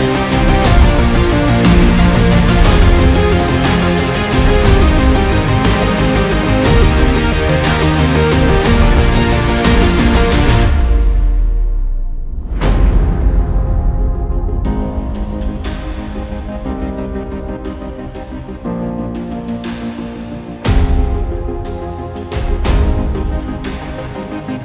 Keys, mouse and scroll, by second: 1.8 alt+scroll up 1, 2.3 alt+scroll down 1, 2.7 alt+scroll up 1, 2.8-3.3 alt+scroll down 3, 3.7 double click, 6.0 double click, 6.6-7.4 super+scroll down 3, 7.4 alt+scroll up 1, 8.0 alt+scroll up 1, 8.1 alt+scroll down 1, 8.5 alt+scroll up 1, 8.8-9.3 alt+scroll down 2, 9.3 alt+scroll up 1, 9.4-9.9 alt+scroll down 1, 9.9 alt+scroll up 1, 11.8 ctrl+t, 13.6 alt+scroll up 1, 13.9 alt+click, 15.0 Up, 19.7 ctrl+z, 21.0 double click, 24.0 ctrl+z.